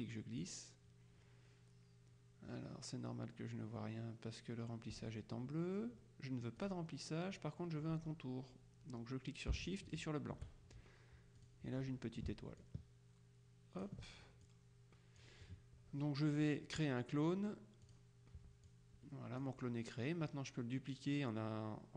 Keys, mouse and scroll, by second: 6.7 click, 10.0 shift+click, 11.5 click, 12.7-14.5 ctrl+drag, 14.6-15.8 drag, 18.0 click, 18.8-20.0 drag.